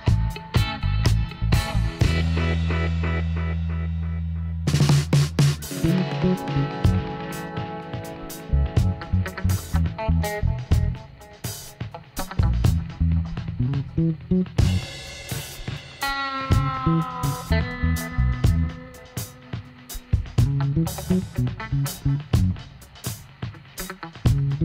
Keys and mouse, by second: 0.1 ctrl+r, 3.7-5.7 middle drag, 5.7 ctrl+r, 7.9-13.6 middle drag, 13.6-18.0 right drag, 17.0 x, 19.4-21.8 right drag, 21.8-24.6 middle drag.